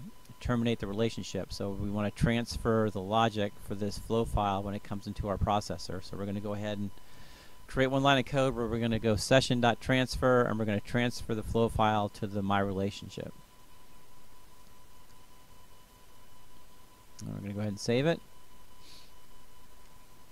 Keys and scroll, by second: 2.7 Return, 3.3 space, 9.6 Return.